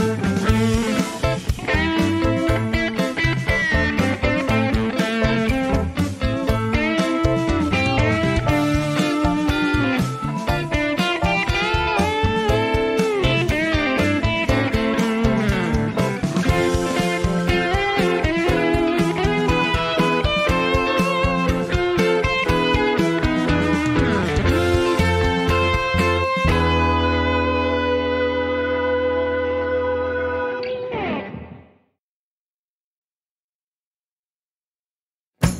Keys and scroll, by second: 3.3 n, 5.4 KP_1, 11.6 shift+d, 11.9 y, 14.5 shift+d, 15.0 y, 24.5 h, 26.2 h.